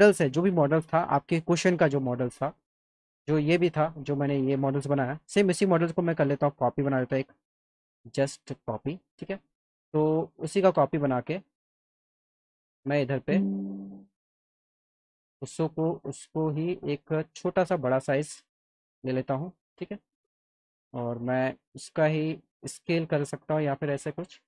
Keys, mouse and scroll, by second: 2.6 alt+middle click, 5.8-7.4 shift+drag, 7.9 scroll up 2, 8.2 click, 8.6 scroll up 2, 8.7 alt+middle click, 10.7 click, 12.5 click, 13.8 click, 14.9 click, 15.4 alt+middle click, 16.5 click, 16.9 alt+middle click, 17.7-19.5 drag, 22.2-23.7 drag.